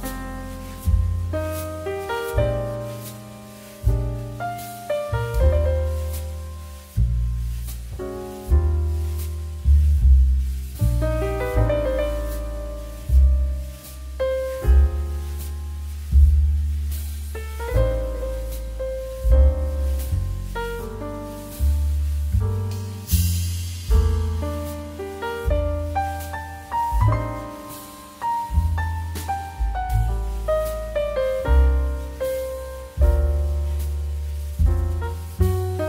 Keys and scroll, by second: 1.9 shift+2, 2.3 shift+space, 8.0 shift+2, 14.3 2.